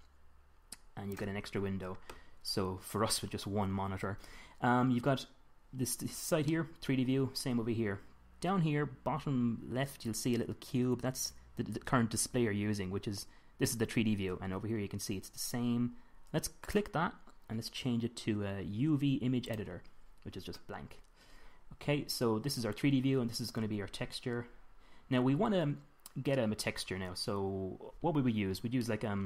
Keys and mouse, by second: 0.0 click, 0.2 click, 6.9-8.3 middle drag, 17.1-19.0 drag.